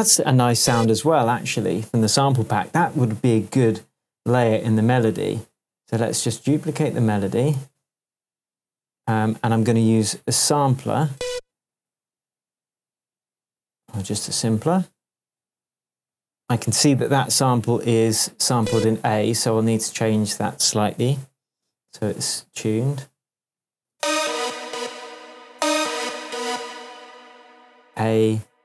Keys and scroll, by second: 7.5 super+d, 23.9 super+space, 24.7 space.